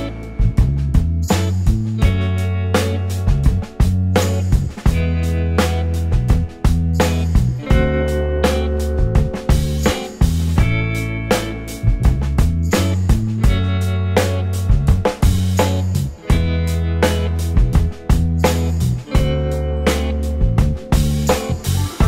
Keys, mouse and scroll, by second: 1.6 typing, 4.1 alt+click, 4.6-5.8 alt+scroll up 3, 5.8 right click, 6.5 alt+click, 9.5 Delete, 10.6 double click, 11.4 Delete, 12.4 scroll, 12.5 scroll down 1, 12.7 alt+click, 13.1 alt+middle click, 14.5 double click, 15.5 ctrl+e, 16.5-17.7 scroll up 1, 19.0 alt+middle click, 19.2 alt+scroll up 1, 20.9 space, 21.5 space.